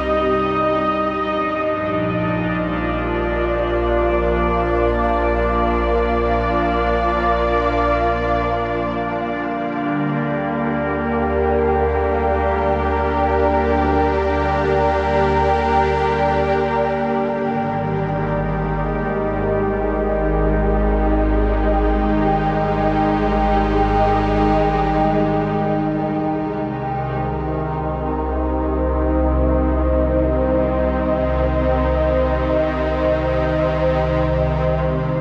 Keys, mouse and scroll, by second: 0.7 right click, 16.2-25.1 drag, 25.2-25.7 typing, 25.3 click, 26.8 click, 27.9-31.8 typing, 28.1 click, 28.5 click, 28.9 click, 29.7 click, 30.1 click, 30.5 click, 31.3 click, 31.9 click.